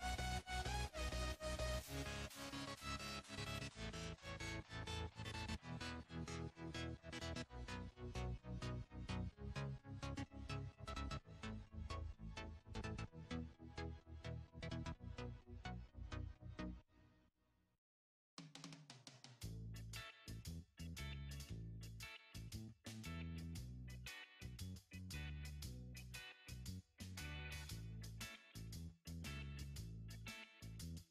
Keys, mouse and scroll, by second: 3.7-4.0 drag, 4.5 click, 5.0-6.5 scroll up 4, 6.5 click, 15.3 KP_1, 17.1 KP_3, 18.4 ctrl+KP_3, 20.0-21.1 drag, 21.4-21.8 scroll up 7, 23.0-25.0 drag, 25.0 scroll up 2, 26.3 scroll up 1, 26.3 s.